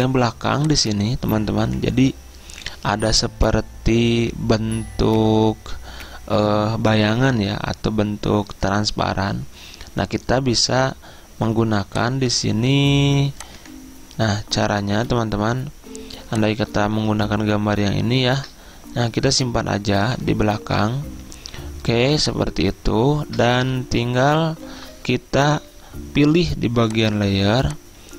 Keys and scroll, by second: 17.0 alt+Tab, 18.8 alt+Tab, 25.6 Return.